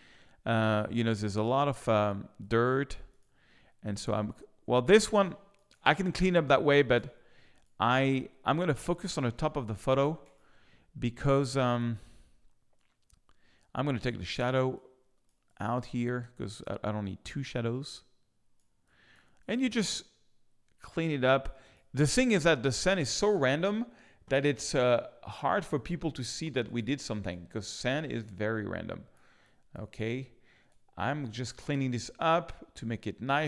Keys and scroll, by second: 6.1 space, 11.3 space, 16.0 space, 22.4 space, 27.2 space, 30.6 space, 30.8 space.